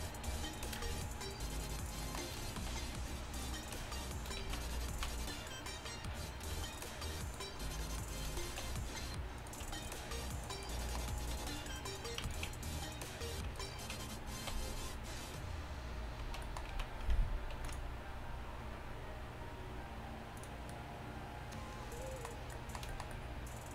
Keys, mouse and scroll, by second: 0.3 f, 2.8 f, 4.5 z, 5.0 z, 8.7 f, 11.4 f, 14.5 f, 16.3 z, 16.8 z, 17.6 ctrl+r, 20.8 middle click, 21.7 middle click.